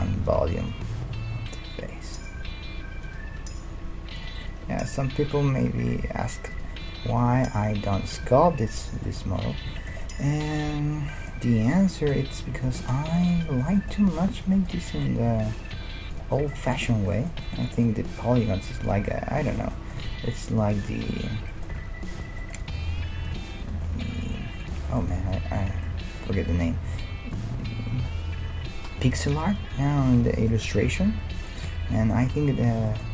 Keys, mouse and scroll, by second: 0.2 ctrl+z, 0.8 g, 3.4 g, 4.5-6.3 right drag, 4.6 g, 6.9-8.9 right drag, 7.3 g, 8.6-17.0 middle drag, 14.3-16.0 right drag, 15.3 e, 18.3 g, 20.1 ctrl+Tab, 20.8-21.8 drag, 21.4 f, 21.8 ctrl+Tab, 22.8 g, 24.1 g, 25.3 g, 26.8 g, 27.9 right click, 29.4-30.5 right drag, 29.7 g, 30.5-33.1 middle drag, 30.9 KP_1.